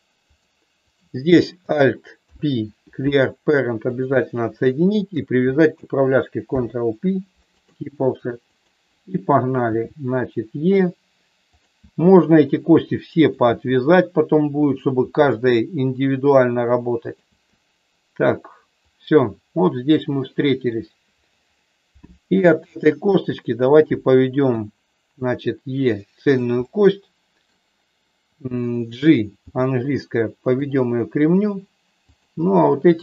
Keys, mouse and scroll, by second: 2.1 alt+p, 6.5 ctrl+p, 8.5 click, 9.7 e, 11.5 click, 11.9 e, 13.2 click, 13.5 e, 14.6 click, 14.9 e, 17.0 click, 17.2 e, 18.9 click, 22.3 shift+middle click, 24.5 e, 26.6 middle click, 29.4 g, 30.4 click.